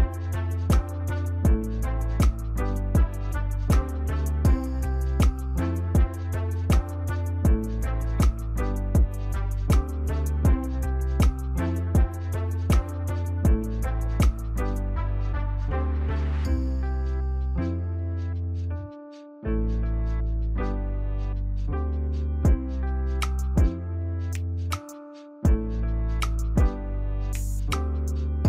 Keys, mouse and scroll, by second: 0.7-1.8 scroll up 1, 2.1 ctrl+t, 3.0 shift+click, 10.7 ctrl+click, 13.0-15.4 scroll up 1, 15.6 ctrl+=, 16.0 ctrl+=, 16.6-17.4 scroll up 2, 17.5 scroll up 1, 18.2 right click, 21.3 shift+click.